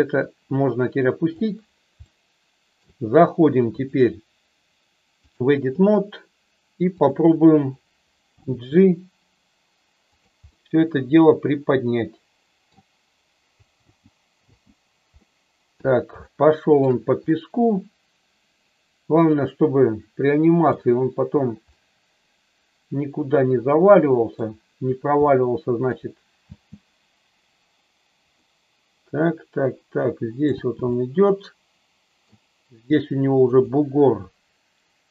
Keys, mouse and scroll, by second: 0.2-1.3 drag, 2.1-2.8 shift+middle drag, 3.8-5.5 drag, 8.3 g, 10.1 click, 10.6-12.7 middle drag, 13.7 space, 14.5 space, 15.0 middle click, 16.2 shift+middle click, 17.3-20.7 middle drag, 21.7-24.3 middle drag, 25.2 shift+middle click, 26.4 space, 28.3-30.3 middle drag, 30.5 space, 30.9-32.3 middle drag, 33.4 click.